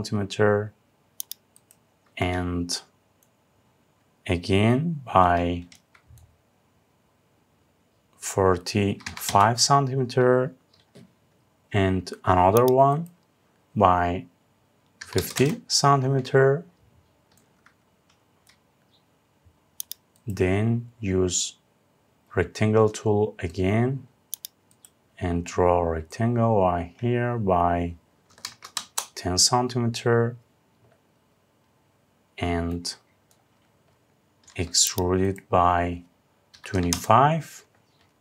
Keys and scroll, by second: 8.9 Return, 15.0 Return, 28.4 Return, 36.5 Return.